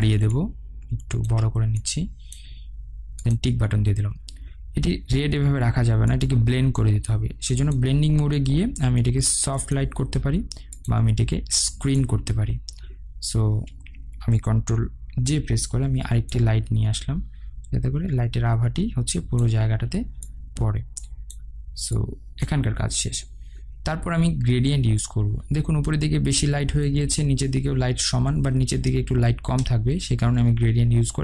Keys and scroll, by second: 15.2 ctrl+j.